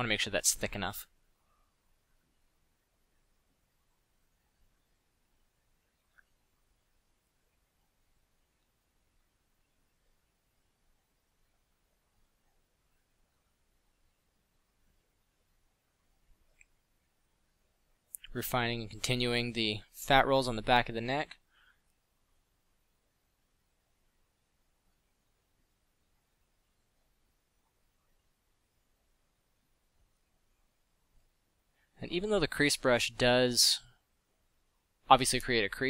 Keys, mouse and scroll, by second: 0.1 f, 4.2 f, 6.2 f, 7.6 f, 8.1 f, 8.8 f, 11.1 f, 14.0 click, 15.4 f, 21.3 f, 22.9 f, 27.8 f, 30.6 f, 33.3 f, 35.2 f.